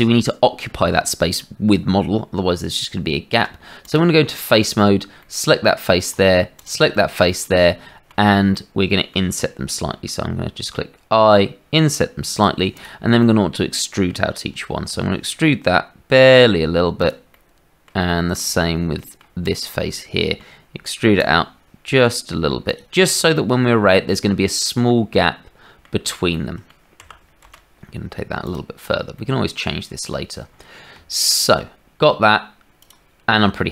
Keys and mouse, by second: 3.8 click, 4.6 click, 5.2 middle click, 6.5 shift+click, 6.9 click, 7.7 shift+middle click, 8.5 middle click, 9.7 i, 12.7 click, 13.2 middle click, 14.9 e, 17.3 middle click, 18.1 shift+middle click, 18.9 middle click, 19.4 click, 19.9 click, 21.2 e, 23.3-25.8 drag, 26.3 click, 26.9 g, 29.2 click, 30.9 Tab, 32.7 click.